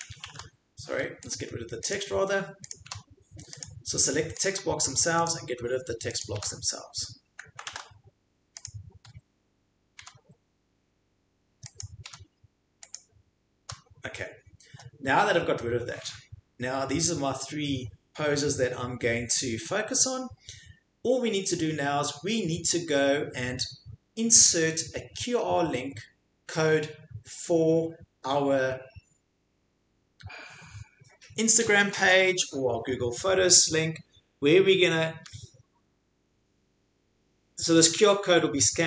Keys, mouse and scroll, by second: 0.2 ctrl+z, 1.8 click, 1.9 click, 2.7 click, 2.9 Delete, 3.6 click, 4.4 click, 4.5 Delete, 5.3 click, 6.2 click, 6.4 Delete, 7.7 ctrl+z, 8.6 click, 10.0 Delete, 11.8 click, 12.0 Delete, 12.9 click, 13.6 Delete.